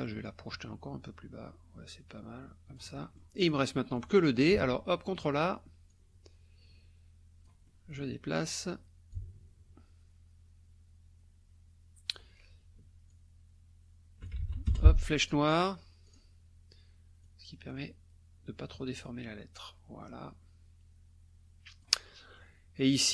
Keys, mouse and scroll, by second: 0.2-3.4 drag, 3.4 click, 3.8 click, 4.5 ctrl+a, 5.9-7.6 drag, 7.7 click, 9.1-12.3 alt+drag, 13.1-14.5 alt+drag, 14.4 ctrl+alt+z, 14.7 ctrl+alt+F1, 16.1 click, 17.2-22.0 drag, 22.1-22.5 drag.